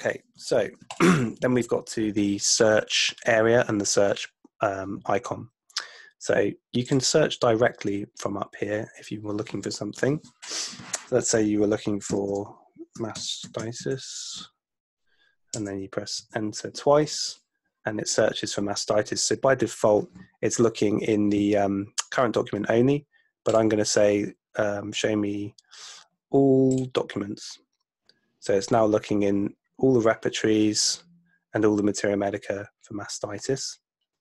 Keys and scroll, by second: 0.5 super+1, 11.8-14.3 typing, 15.5 Return, 16.3 Return.